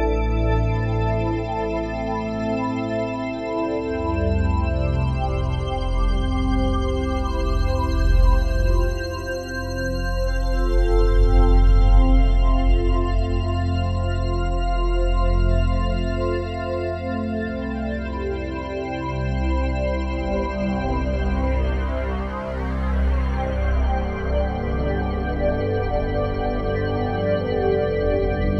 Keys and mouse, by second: 7.2 s, 7.5 z, 10.3 Escape, 12.7-14.0 drag, 14.0-14.8 typing, 14.8 Escape, 16.3-17.6 ctrl+alt+drag, 17.6 s, 18.6 Page_Down, 18.7 Page_Down, 19.1 Page_Down, 19.2 Page_Down, 19.4 Page_Down, 19.6 Page_Down, 19.7 Page_Down, 19.8 Page_Down, 20.0 Page_Down, 20.1 Page_Down, 20.3 Page_Down, 20.4 Page_Down, 20.6 Page_Down, 20.9 Page_Down, 21.2 Page_Down, 21.4 Page_Down, 21.6 Page_Down, 23.3 Escape, 24.3-25.9 ctrl+alt+drag, 25.6 s, 25.9 z.